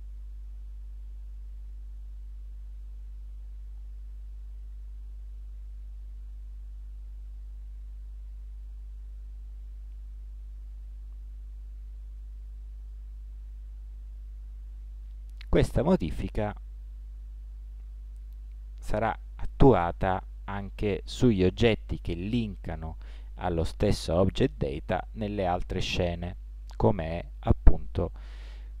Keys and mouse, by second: 4.9 s, 14.3 Tab.